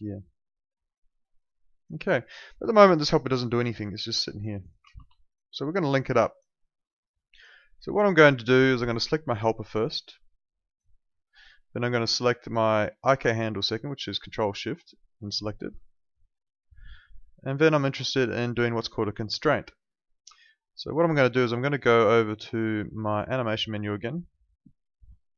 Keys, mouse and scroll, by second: 0.2 alt+right click, 0.4 alt+click, 1.1 alt+middle click, 1.3 alt+right click, 1.6 alt+click, 5.1 alt+click, 5.4 alt+right click, 5.7 alt+middle click, 6.0 alt+right click, 6.2 alt+click, 6.6 alt+middle click, 6.9 alt+right click, 7.1 alt+click, 9.0 click, 14.7 ctrl+shift+click, 21.3 ctrl+2, 25.0 Escape.